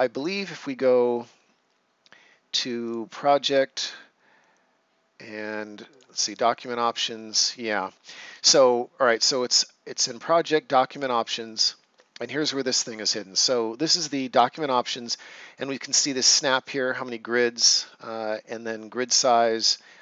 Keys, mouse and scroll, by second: 0.1 click, 2.8 click, 5.8 click, 8.2 Escape, 10.9 click.